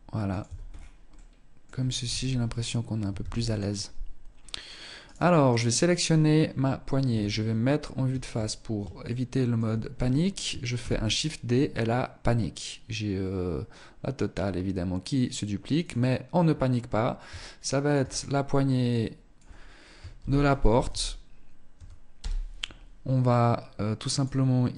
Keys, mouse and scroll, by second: 0.3 middle click, 1.3 KP_0, 1.8-2.3 scroll up 1, 2.5 ctrl+s, 3.6 scroll up 2, 4.3 right click, 6.3 KP_1, 7.7 scroll down 3, 8.1 shift+middle click, 10.1 shift+d, 15.1 click, 16.8 ctrl+click, 23.3 click, 24.4 click.